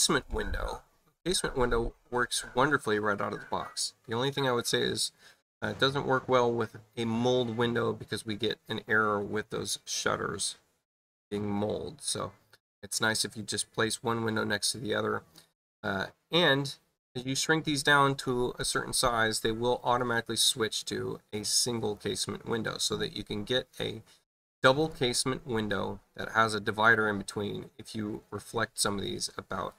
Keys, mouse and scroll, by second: 15.5 space, 16.3 click, 17.4-18.5 drag, 19.9 click, 20.7-21.9 drag, 24.8 click, 29.1 space, 29.6 click.